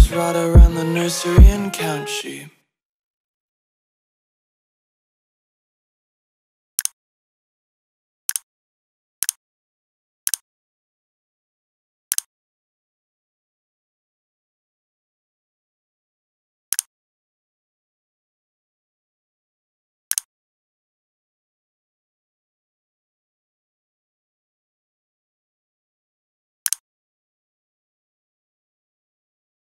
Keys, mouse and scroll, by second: 0.3 v, 0.8 click.